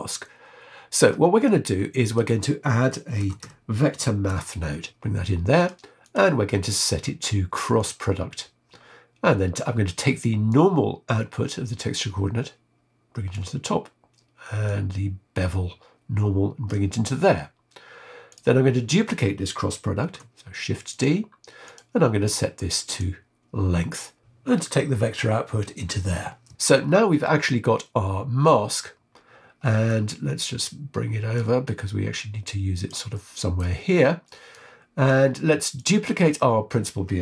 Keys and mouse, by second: 1.3 click, 2.0 click, 3.2 shift+a, 6.0-7.8 drag, 10.4 click, 11.8-13.3 drag, 14.6 click, 18.2 click, 20.0 shift+d, 21.6-23.0 drag, 25.1-26.1 drag, 26.4 middle click, 27.2-28.5 middle drag, 29.8-31.5 drag, 31.6-32.9 drag, 33.1 middle click, 34.5 click, 35.6 click.